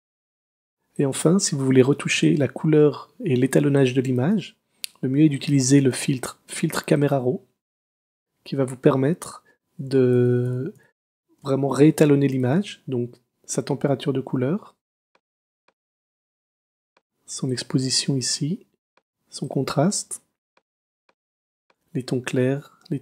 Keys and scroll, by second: 2.2 space, 10.2 super++, 11.4 super+space, 12.1 space.